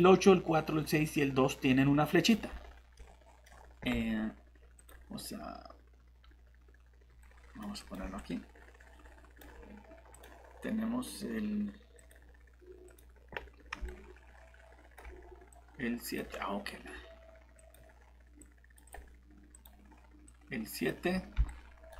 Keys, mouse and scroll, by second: 3.0 middle click, 4.8 click, 7.2 right click, 7.8 click, 7.8 typing, 13.9 right click, 14.3-15.0 typing, 15.5 click, 21.5 right click.